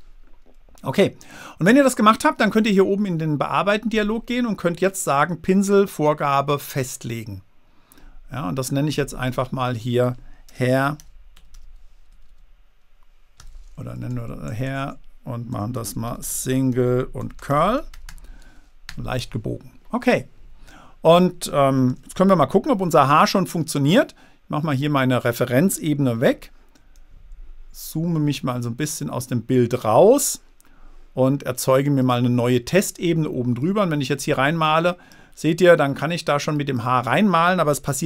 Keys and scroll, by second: 11.1 i, 11.7 BackSpace, 11.9 r, 12.5 BackSpace, 13.8 r, 14.1 Left, 14.8 Right, 15.6-18.9 typing, 19.3 Return, 22.3 super+d, 26.5 super+-, 27.4 super+-.